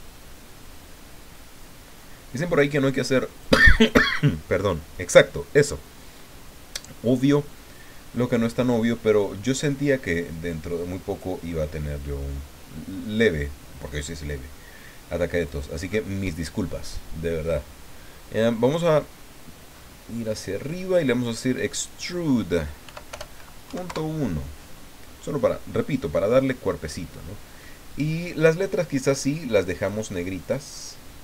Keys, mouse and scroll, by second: 0.2-1.5 middle drag, 2.0-3.6 drag, 6.8-8.7 drag, 9.2-11.4 drag, 11.5-11.9 scroll up 1, 12.0-13.2 middle drag, 14.0-15.6 drag, 19.7-20.1 scroll up 1, 21.7 click, 22.9 End, 23.1 BackSpace, 23.7 KP_1, 23.8 KP_Enter, 25.5-26.5 drag, 26.9 click, 27.9 click, 29.7 click, 30.4 click.